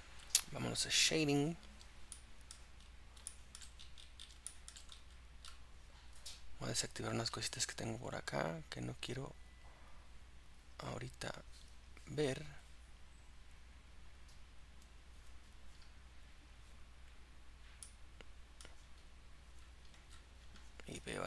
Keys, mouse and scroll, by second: 1.2 click, 2.2 middle click, 2.8-3.3 scroll up 3, 3.3 shift+middle click, 3.8-4.5 scroll up 8, 4.5 shift+middle click, 5.0-6.6 scroll up 6, 6.6 click, 12.3-14.0 drag, 16.7 click, 18.0-21.2 middle drag.